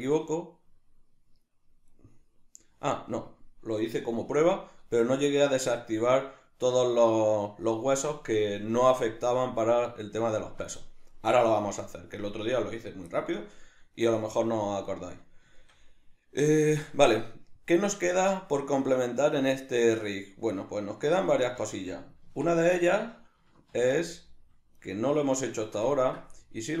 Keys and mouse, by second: 1.9 right click, 3.2 right click, 5.0 right click, 9.3 right click, 14.0-21.3 middle drag, 22.2 Tab, 22.8 shift+middle click, 23.7 shift+a, 24.8 right click, 25.6-26.8 shift+middle drag.